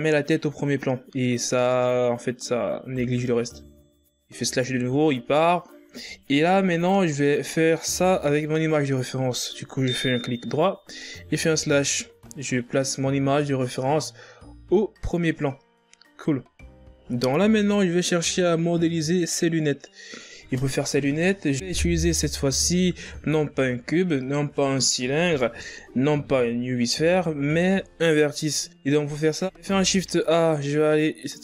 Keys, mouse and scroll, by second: 4.4 KP_Divide, 6.7 right click, 11.5 KP_Divide, 16.2-18.0 scroll up 5, 18.0-19.4 scroll up 1, 28.6-29.4 scroll up 3, 29.4 scroll up 3, 29.7 shift+a.